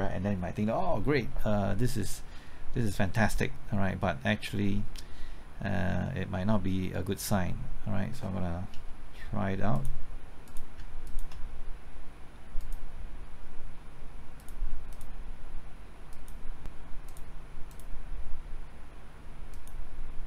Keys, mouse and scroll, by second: 10.7 typing, 11.0-20.2 shift+drag.